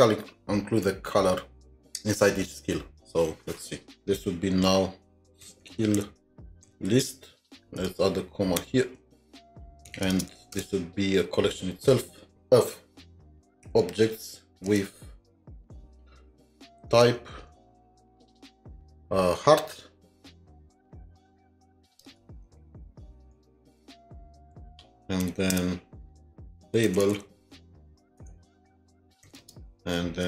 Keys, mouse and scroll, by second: 5.2-7.4 typing, 8.6 typing, 9.9 typing, 10.5 Return, 13.5 Return, 14.7 Return, 15.5 typing, 16.6-17.4 typing, 17.8-18.6 scroll up 2, 18.9 typing, 19.4 scroll down 1, 22.1-24.0 typing, 25.2 typing, 25.5 Return, 26.8-29.4 typing.